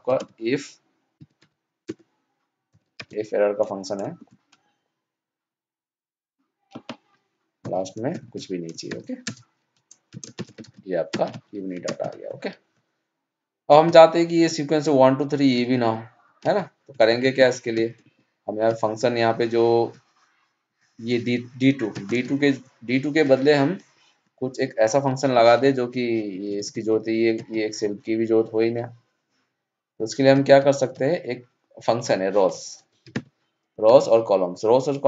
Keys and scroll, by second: 10.3 ctrl+shift+Down, 10.6 ctrl+d, 15.6 ctrl+Up.